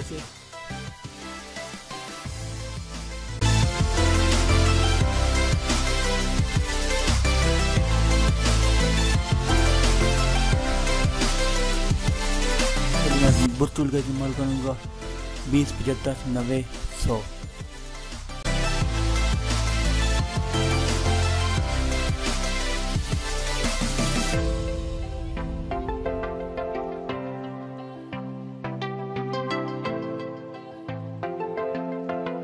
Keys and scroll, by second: 0.2 ctrl+j, 15.8 ctrl++, 24.3 ctrl+alt+z.